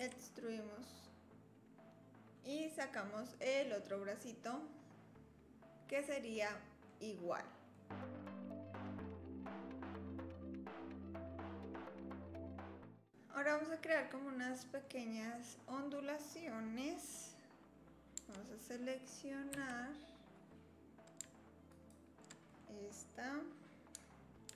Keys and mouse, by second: 0.0 e, 3.7-6.9 drag, 7.7 click, 7.9 3, 8.2 shift+click, 8.4 click, 8.8 click, 9.0-12.2 typing, 9.4 click, 13.1-14.8 drag, 19.5 2, 21.8 alt+click, 22.5 click.